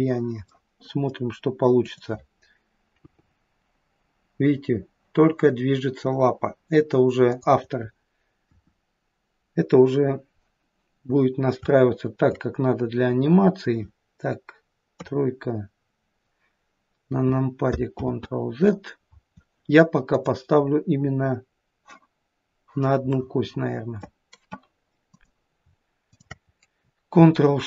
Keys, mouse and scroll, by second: 0.6 middle click, 1.1 middle click, 1.8 click, 8.5 KP_1, 10.7-11.6 scroll down 1, 11.6-12.2 scroll down 1, 12.2 shift+middle click, 12.9 middle click, 15.0 KP_3, 15.9-17.7 scroll up 1, 18.1 ctrl+z, 20.1 click, 23.2 middle click, 25.2 click, 26.1 shift+click.